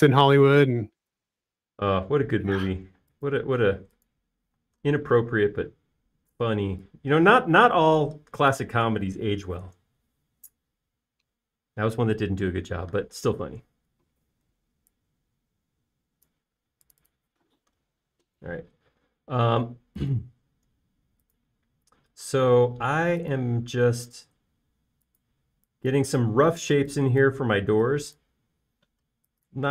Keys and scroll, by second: 0.6 alt+space, 4.6 m, 5.7-6.5 typing, 14.6 space, 15.8 f, 18.1 typing, 19.5 typing, 22.6-23.3 typing, 26.7 e.